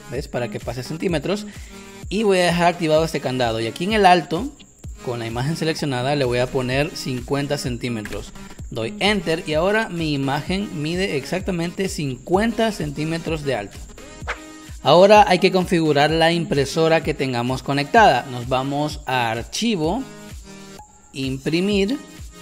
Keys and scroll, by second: 7.5 0, 8.0 Return, 11.9 space, 12.8 space.